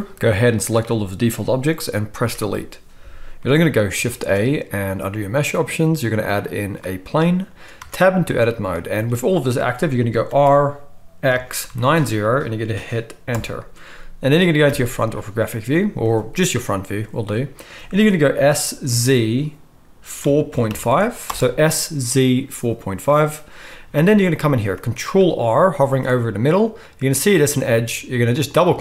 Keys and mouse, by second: 2.2 Delete, 4.1 shift+a, 7.9 Tab, 10.4 r, 14.7 KP_1, 18.3 s, 25.9 ctrl+r, 28.7-28.8 middle drag.